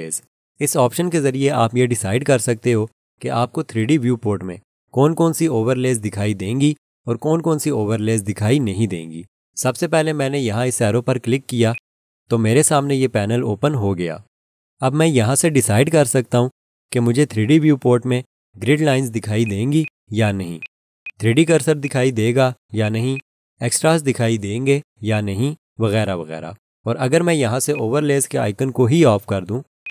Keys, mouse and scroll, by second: 11.7 click, 18.9 click, 19.8 double click, 29.8 click.